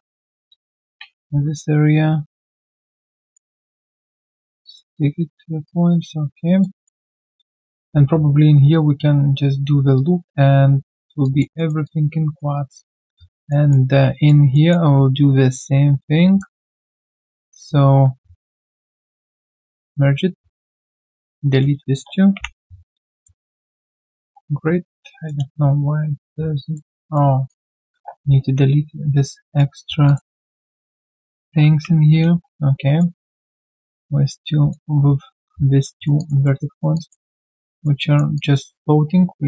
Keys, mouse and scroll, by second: 0.9 right click, 1.3 ctrl+shift+q, 3.2 alt+right click, 3.5 alt+click, 3.8 alt+middle click, 4.1 alt+click, 4.6 alt+right click, 4.8 alt+click, 5.3-5.6 alt+scroll down 1, 5.6 alt+click, 6.7 alt+right click, 7.0 alt+middle click, 7.6 alt+click, 9.7 alt+click, 11.2 alt+click, 11.5 alt+middle click, 11.8 alt+click, 12.5 alt+right click, 13.2 alt+right click, 13.5 alt+middle click, 13.8 alt+scroll down 1, 14.1 alt+right click, 14.5 alt+middle click, 15.1 right click, 17.0 w, 18.0 ctrl+shift+q, 20.4 q, 20.5 right click, 21.5 shift+click, 22.3 ctrl+Delete, 23.8 right click, 24.3 scroll down 1, 25.5 shift+right click, 27.0 alt+right click, 28.4 alt+right click, 29.4 alt+right click, 30.6 shift+click, 31.7 ctrl+Delete, 32.7 alt+right click, 33.7 right click, 33.7 alt+click, 34.0 alt+middle click, 34.7 alt+click, 35.9 alt+right click, 36.1 alt+click, 36.4 alt+middle click, 36.7 alt+right click, 36.9 alt+click, 37.2 alt+right click, 37.5 alt+click, 37.7 alt+right click, 38.0 alt+click.